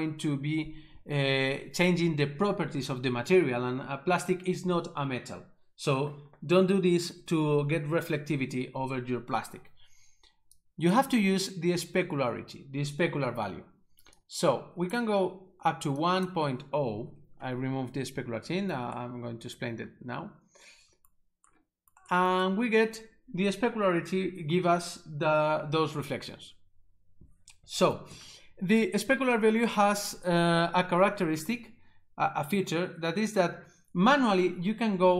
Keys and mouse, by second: 10.6 click, 14.2 click, 16.1 click.